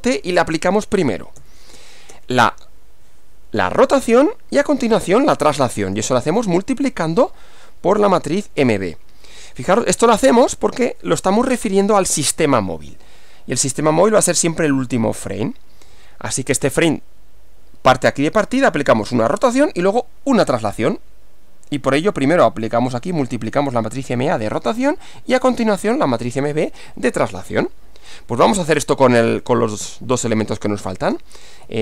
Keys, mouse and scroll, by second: 0.0-2.1 typing, 8.2 shift+m, 8.7 shift+b, 10.4 Return, 30.5-31.8 typing.